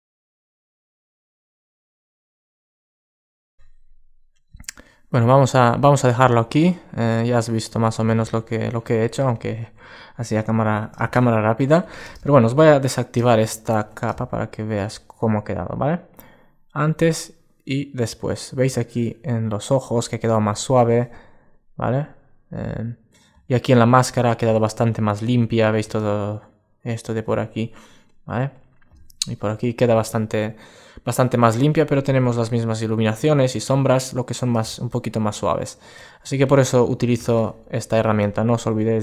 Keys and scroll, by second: 6.5 super+space, 9.0 alt+space, 9.9 alt+space, 13.2 alt+space, 33.3 alt+space, 36.1 alt+space.